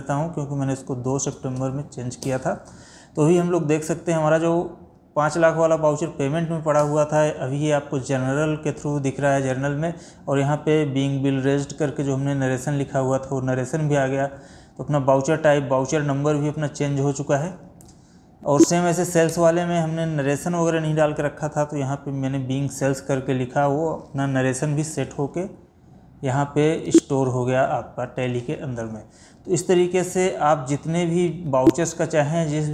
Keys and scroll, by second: 17.3 Escape, 18.6 Down, 26.2 Escape, 30.2 Escape, 31.2 Escape.